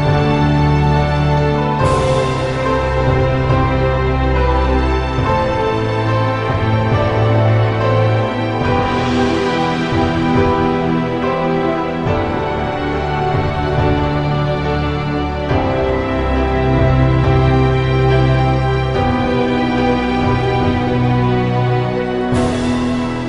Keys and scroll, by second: 0.7 -, 1.1 -, 2.5 +, 13.7 ctrl+z, 19.2 -, 20.0 ctrl+z, 22.8 -.